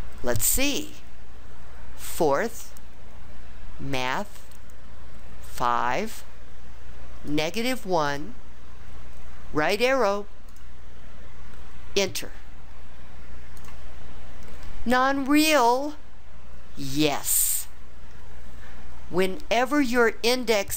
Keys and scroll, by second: 2.0 4, 5.6 5, 8.0 1, 10.5 ), 13.6 Return.